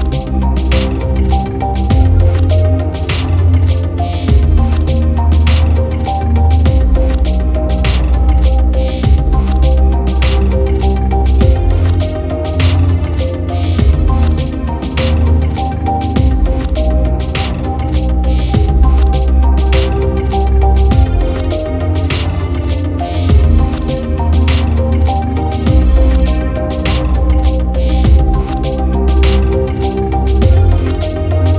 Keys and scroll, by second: 5.4 ctrl+alt+z, 6.3 ctrl+-, 7.6 ctrl+=, 11.5 ctrl+=, 12.2 ctrl+-, 12.6 ctrl+=, 13.4 ctrl+0, 24.4 ctrl+i, 27.0 ctrl+=.